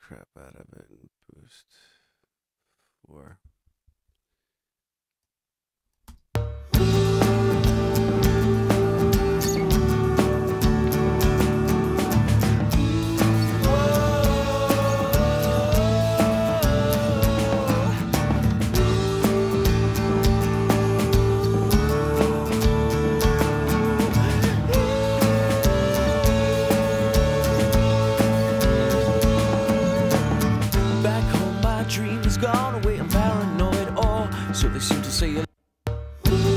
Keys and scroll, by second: 6.0 space, 35.1 space.